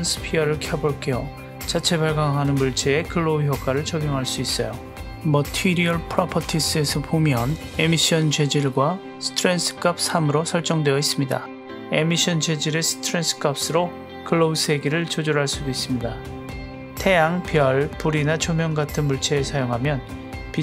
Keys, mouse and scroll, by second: 3.1-13.6 drag, 19.0 click.